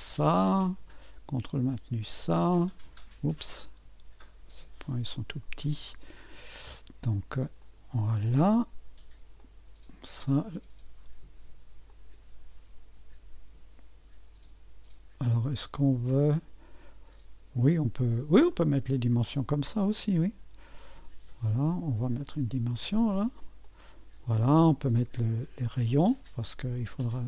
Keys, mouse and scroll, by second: 0.0 click, 2.1 click, 3.5-3.9 scroll up 2, 5.4 click, 7.6 click, 9.4-10.5 drag, 11.9 click, 18.5 click, 22.2 click, 23.6 click.